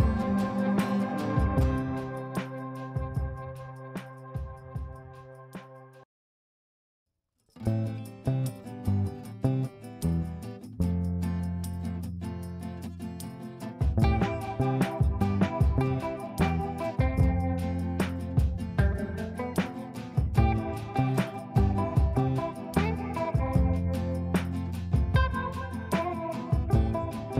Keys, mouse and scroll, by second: 0.0-0.2 typing, 2.4-9.9 typing, 12.0-13.9 typing, 14.4 ctrl+space, 16.3 click, 18.5-21.2 drag, 21.2 F2, 21.4-23.1 drag, 24.8-26.6 drag.